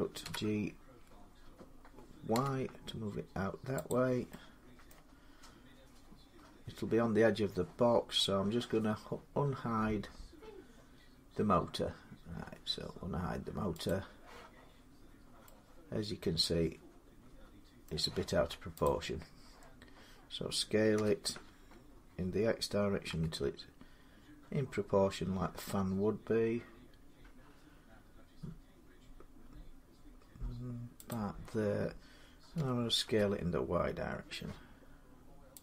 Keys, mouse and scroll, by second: 0.0 g, 1.4-3.0 middle drag, 2.1 y, 3.7-4.7 drag, 4.7 middle click, 9.3-9.7 scroll up 3, 10.0-11.0 scroll up 3, 11.0-13.1 scroll down 3, 13.1-13.7 scroll down 1, 13.7 click, 14.5 scroll up 2, 14.7 scroll, 16.6 scroll, 17.6 middle click, 18.0 scroll up 6, 19.1 scroll down 2, 20.7 s, 22.9 middle click, 22.9 x, 30.9-35.6 drag, 32.3-32.8 typing.